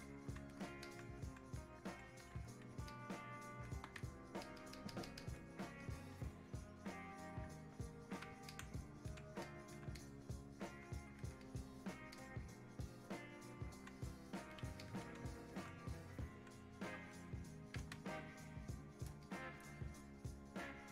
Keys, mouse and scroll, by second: 0.9-2.9 alt+drag, 2.9-4.5 ctrl+drag, 4.5 ctrl+click, 5.8-8.5 drag, 8.5 alt+click, 9.5 alt+click, 10.0-11.4 drag, 11.4 alt+click, 12.2-14.8 drag, 14.8 ctrl+click, 15.5-17.1 alt+drag, 17.1 click, 18.0 space, 19.3 click.